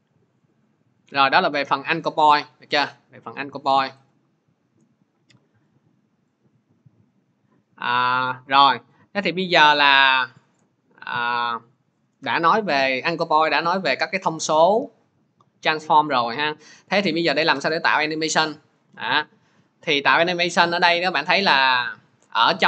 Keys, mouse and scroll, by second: 0.4 click, 1.7 click, 3.4 click, 3.9 click, 6.1 click, 8.7 click, 11.3 click, 11.6 shift+click, 11.8 shift+click, 12.2 Delete, 14.2 click, 15.8 click, 16.5 click, 17.2 click, 21.2 click, 22.5 click.